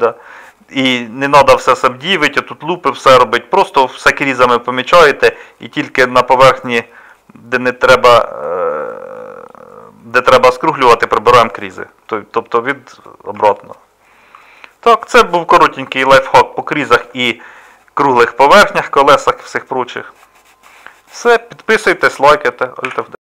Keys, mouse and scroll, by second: 3.1 Tab, 13.4 Tab, 16.5-17.1 middle drag, 18.1 middle click, 19.9-20.2 middle drag, 20.6-22.2 middle drag.